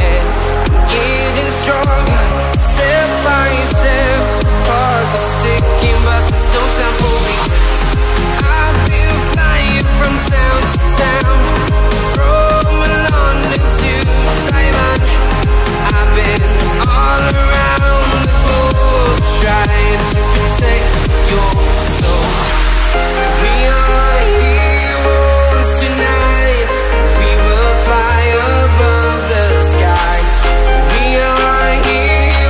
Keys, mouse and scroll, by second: 3.1 0, 4.3 click, 6.3 click, 8.1-9.4 alt+scroll up 5, 8.5 space, 8.5 click, 9.4 click, 12.9 alt+scroll down 1, 13.3-13.8 alt+scroll up 2, 14.4 click, 19.5 click, 23.5 Down, 25.3 click, 28.1 space, 28.1 click, 28.2 space, 28.7 alt+shift+click, 29.6-30.0 scroll up 1, 30.0 click, 30.1 alt+scroll up 2, 30.4 space, 30.7 click, 31.7 Down.